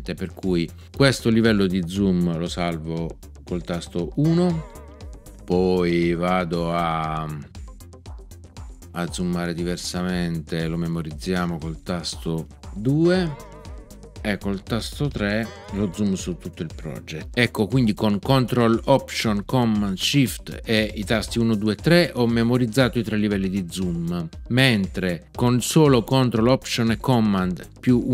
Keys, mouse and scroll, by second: 4.2 ctrl+alt+shift+super+1, 13.0 ctrl+alt+shift+super+2, 15.4 ctrl+alt+shift+super+3.